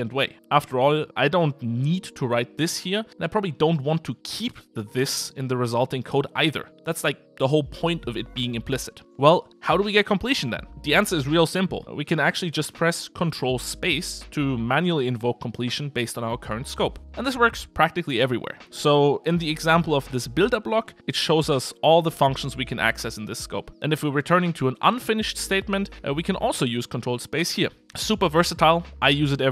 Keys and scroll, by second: 10.9 ctrl+space, 22.9 ctrl+space, 27.4 Escape.